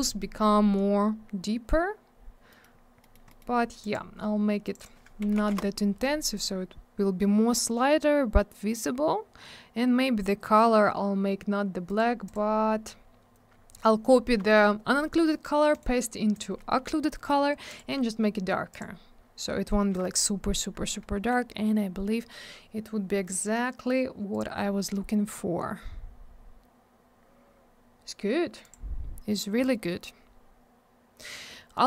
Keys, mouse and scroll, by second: 0.0-0.4 scroll down 1, 2.5 middle click, 2.6 middle click, 2.7 scroll up 1, 3.0 middle click, 3.1 middle click, 3.3 middle click, 3.4 middle click, 3.8 click, 3.9 click, 4.6 click, 4.7 click, 4.8 click, 4.8 double click, 5.0-5.9 typing, 6.6-7.4 scroll up 1, 7.9 scroll down 1, 11.9 right click, 12.0 right click, 12.3 click, 12.3 double click, 15.7 right click, 15.8 right click, 16.3 click, 16.4 click, 17.7 click, 17.8 click, 18.7 click, 18.8 click, 22.4-22.7 scroll down 1, 24.3 click, 24.4 click, 25.0-25.4 scroll up 1, 27.2-28.0 scroll down 1, 28.6 click, 29.8-30.4 scroll down 1.